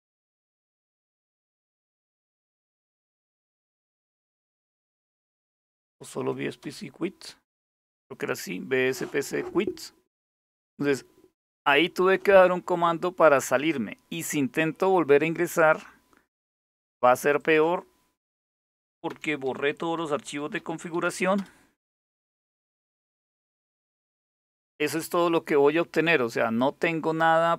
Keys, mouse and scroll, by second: 1.7 Up, 4.4 Left, 4.6 Left, 4.8 Left, 4.9 Left, 5.1 Left, 5.6 Delete, 5.8 Delete, 6.3 Return, 15.2 click, 17.0 click, 17.8-21.1 typing.